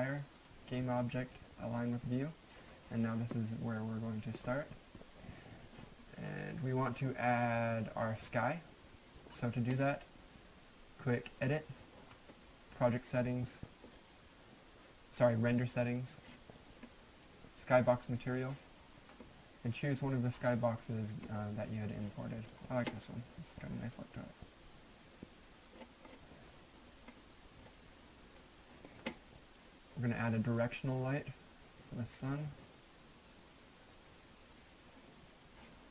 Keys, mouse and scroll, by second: 7.3 middle click, 7.8 right click, 11.4 click, 15.6 click, 18.0 click, 20.9-25.6 right drag, 25.7-26.4 scroll down 1, 26.4 right click, 27.5 middle click, 27.6 scroll down 2, 28.3-28.6 right drag, 29.5 click, 34.4 click.